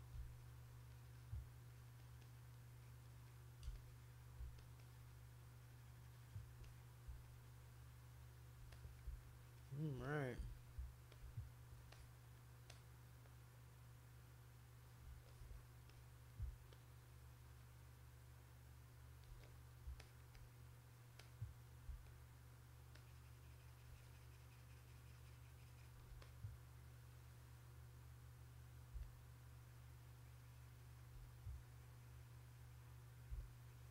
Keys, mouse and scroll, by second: 0.3 alt+click, 0.6 alt+click, 0.9 alt+click, 1.1 alt+click, 1.7 alt+click, 2.0 alt+click, 2.2 alt+click, 2.8 alt+click, 3.0 alt+click, 3.3 alt+click, 3.7 shift+click, 4.6 alt+click, 4.8-6.5 alt+drag, 6.6 click, 7.2-8.5 alt+drag, 8.7 click, 9.2 shift+click, 9.6 shift+click, 10.0 click, 11.1 alt+click, 11.9 click, 12.7 click, 14.2 click, 15.3 alt+click, 15.9 click, 16.7-19.2 shift+drag, 19.4 click, 20.0 alt+click, 20.3 click, 21.2 click, 22.9-25.9 shift+drag, 26.2 click, 28.0 click, 28.2 click, 28.4 click, 29.0-31.0 shift+drag, 31.2-33.3 drag, 33.4-33.9 shift+drag.